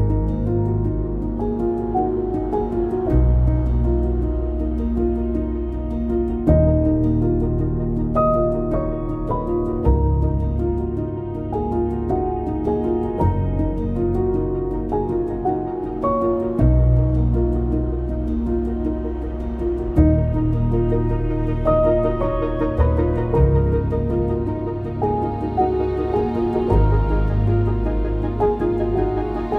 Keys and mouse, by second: 0.4 click, 1.4 ctrl+b, 3.2 1, 3.7 click, 4.4 g, 4.6 g, 5.2 click, 6.2 g, 6.3 g, 6.8 click, 7.7 g, 8.3 click, 9.3 click, 9.5 g, 10.0 click, 11.0 g, 11.6 click, 12.5 click, 13.1 click, 13.4 g, 14.1 click, 14.7 click, 14.9 g, 15.4 click, 16.1 g, 16.6 click, 17.2 click, 17.4 g, 18.4 click, 18.6 g, 19.1 click, 20.4 click, 21.1 g, 22.1 click, 22.7 g, 23.2 click, 23.7 click, 23.9 g, 24.2 click, 25.8 click, 26.6 g, 26.7 g, 27.1 click.